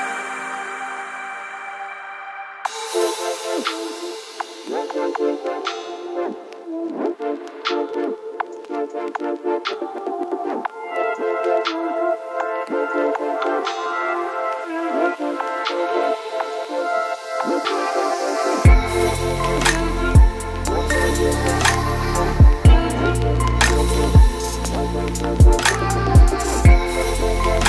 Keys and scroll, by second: 2.1 ctrl+t, 6.4 v, 7.0 space, 14.4 ctrl+a, 14.6-16.0 typing, 16.1 ctrl+t, 23.8 ctrl+t.